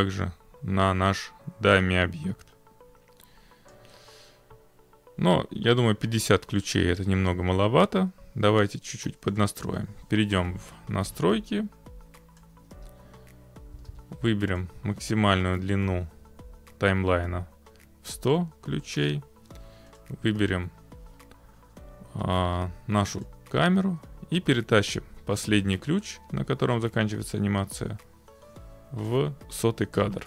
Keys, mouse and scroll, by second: 3.7 click, 9.4 click, 12.4 click, 12.8-14.4 typing, 14.6 click, 18.2 click, 20.0 click, 23.3 click, 24.9 click, 29.1 click, 30.0 click.